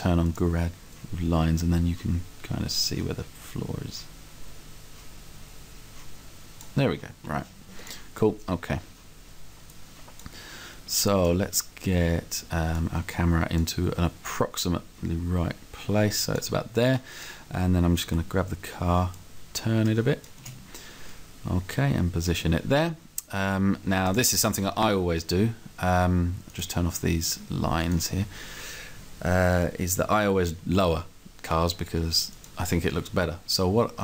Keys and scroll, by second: 18.2 r, 20.4 space.